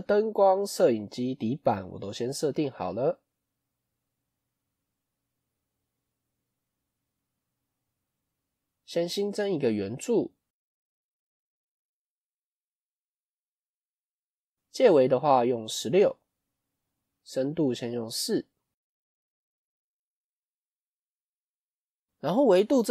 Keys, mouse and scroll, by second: 3.6 click, 4.0 click, 4.7-5.9 middle drag, 5.9 KP_5, 7.7 shift+scroll up 1, 7.8-8.7 shift+middle drag, 12.6-20.0 drag.